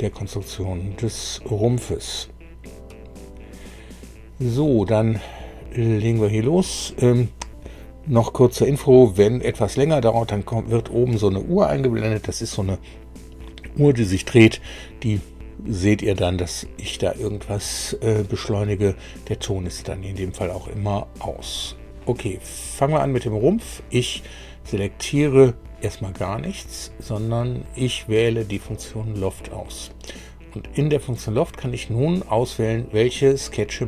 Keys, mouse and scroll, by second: 23.5 click, 26.6 click, 28.6 click.